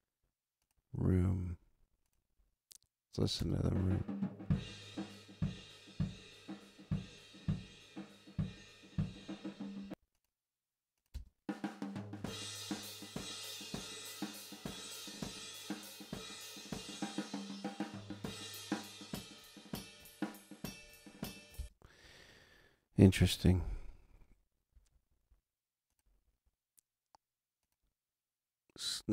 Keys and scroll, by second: 3.4 space, 9.8 space, 21.5 space.